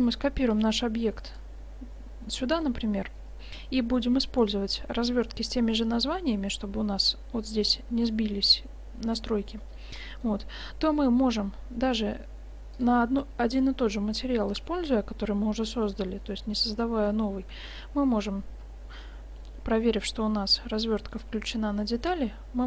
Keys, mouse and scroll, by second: 2.7-3.3 drag, 6.5-7.7 drag, 10.1-11.9 middle drag, 12.8-16.3 drag, 17.6 Tab, 22.1-22.6 middle drag.